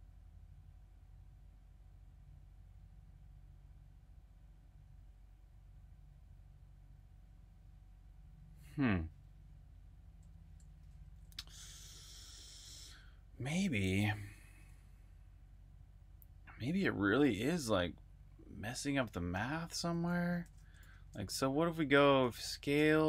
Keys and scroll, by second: 10.6 super+Tab, 12.7 super+Tab, 14.1 Escape, 14.3 j, 17.1 j, 18.3-23.0 typing.